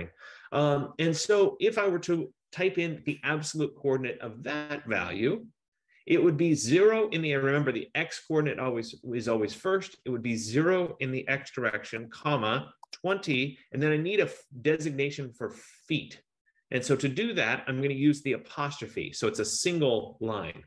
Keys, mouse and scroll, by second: 0.2 F15, 11.4-12.0 typing, 13.0-13.4 typing.